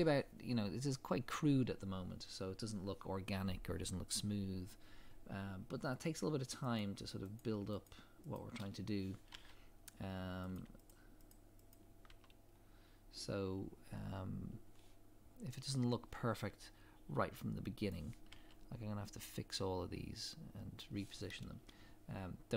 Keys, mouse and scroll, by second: 5.7 scroll up 1, 6.8 click, 7.4 shift+click, 9.3 f, 10.5 click, 10.9 shift+click, 12.1 f, 12.5 scroll down 1, 17.9 click, 18.3 g, 21.7 scroll down 1.